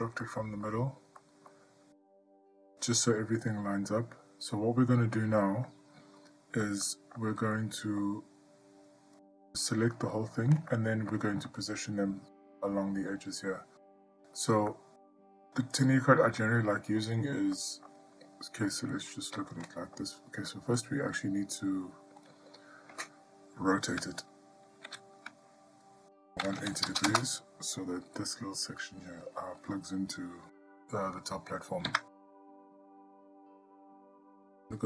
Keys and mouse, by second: 0.5-0.9 shift+middle drag, 1.4-1.7 middle drag, 5.4-5.9 middle drag, 7.1-7.4 shift+middle drag, 7.8-8.2 middle drag, 9.5-10.4 drag, 10.9-11.3 ctrl+middle drag, 11.7-12.1 middle drag, 14.9-15.5 ctrl+middle drag, 16.6-17.2 middle drag, 17.8-18.1 shift+middle drag, 19.1 click, 19.9-20.2 ctrl+middle drag, 25.1 r, 32.4 Tab.